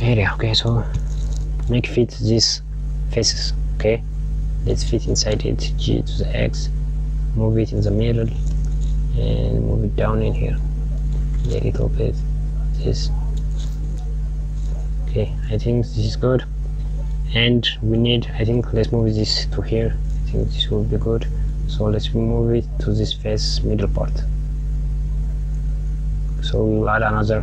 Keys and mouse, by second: 0.8 g, 5.1 g, 8.0 g, 11.4 g, 20.5 g.